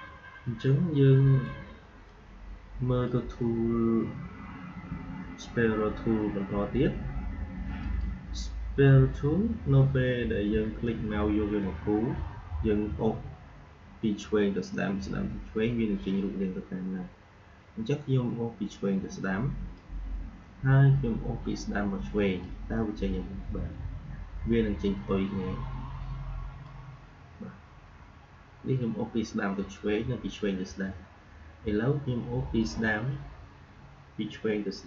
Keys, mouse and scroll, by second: 0.5-4.6 drag, 4.6 Delete, 7.7 click, 10.7-21.7 drag, 22.3-28.1 drag, 28.1 alt+scroll down 1, 28.5 alt+scroll up 1, 30.5-32.3 scroll down 1, 32.5-34.8 drag.